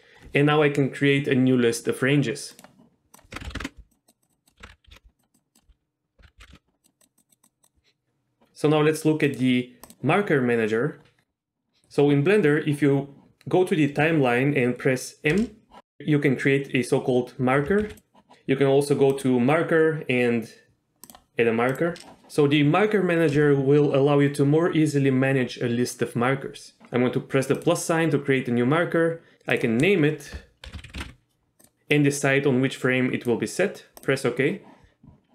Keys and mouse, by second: 2.8-4.0 drag, 4.1-5.2 drag, 5.4-7.1 drag, 6.5 KP_5, 7.2 click, 9.4 click, 9.9-11.2 drag, 15.5 m, 18.0 click, 19.4-20.4 drag, 21.3-22.1 drag, 26.8 click, 27.7-34.2 drag.